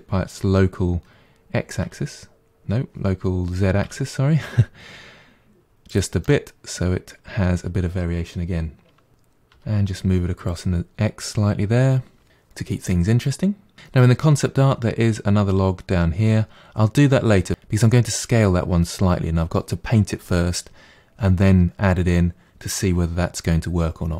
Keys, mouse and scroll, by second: 6.3-9.1 middle drag, 9.1 g.